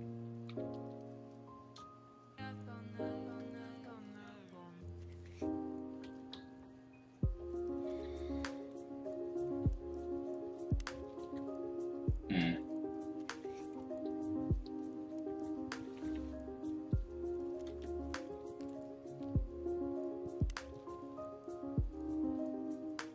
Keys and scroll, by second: 0.4 ], 0.6 ], 5.2 x, 6.0 ctrl+z, 6.3 x, 7.8 ctrl+z, 11.2 ctrl+z, 14.9-16.8 typing, 17.6 ctrl+z.